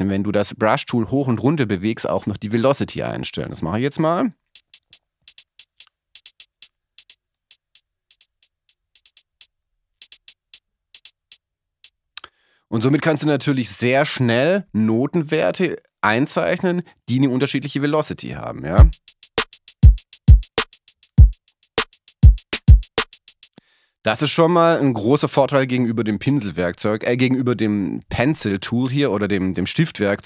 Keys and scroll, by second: 18.7 space, 23.5 space.